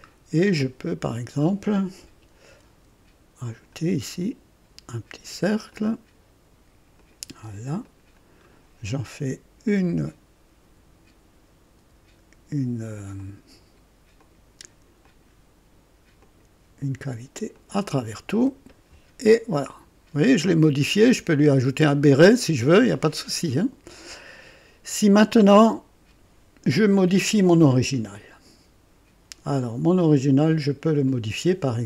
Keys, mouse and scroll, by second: 0.1 middle click, 0.1 scroll up 1, 0.6 right click, 2.5 &, 3.4 click, 5.7 click, 6.9 click, 7.8 click, 9.6 click, 10.1 typing, 11.7 typing, 13.1 click, 14.2 click, 15.0 click, 16.2 click, 17.5 click, 18.4 typing, 19.5-21.3 drag.